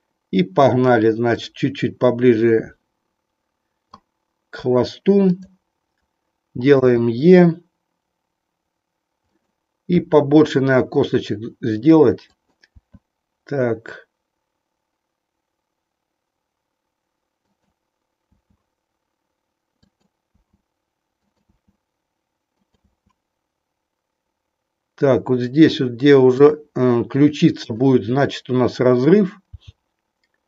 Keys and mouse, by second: 1.3-3.8 drag, 5.2 click, 6.8 e, 9.3 click, 12.3 click, 12.8 e, 17.5 click, 18.3 e, 19.8 click, 20.3 e, 21.3 e, 22.6 click, 22.8 e, 26.5 click, 27.5 click, 29.5 g.